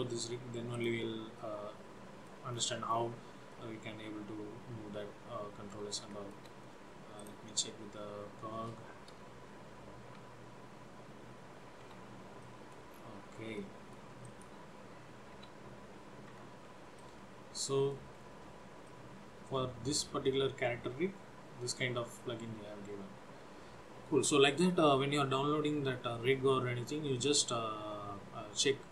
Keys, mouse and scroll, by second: 0.0 click, 0.9 click, 1.5 middle click, 2.6-3.2 scroll down 5, 3.6 middle click, 6.3 shift+middle click, 7.3 click, 10.3 g, 12.6 middle click, 13.0-13.4 scroll down 4, 13.6 middle click, 14.4 click, 15.5 g, 17.1 middle click, 18.3 scroll up 4, 19.0 middle click, 20.4 scroll down 2.